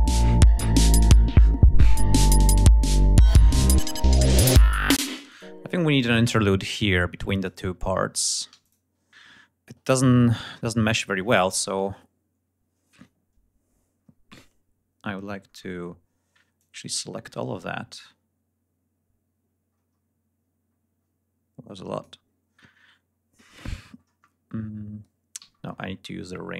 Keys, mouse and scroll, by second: 3.6 ctrl+scroll up 2, 4.9 space, 5.2 click, 7.3 click, 8.4 g, 8.5 click, 9.0-9.6 ctrl+scroll down 4, 13.1-13.5 scroll up 2, 13.8 scroll down 2, 14.7 scroll down 2, 15.3-15.6 scroll up 2, 15.9 scroll down 2, 16.5 click, 16.8-18.2 scroll down 5, 19.6-20.7 scroll down 4, 20.9-21.4 scroll down 2, 21.4 scroll down 1, 22.4-22.7 scroll up 2, 22.9 scroll down 2, 23.0-23.5 scroll up 2, 23.7 scroll up 2, 23.9-24.3 scroll down 2, 24.5-24.9 scroll up 2, 25.3 r, 25.4-26.3 scroll up 4.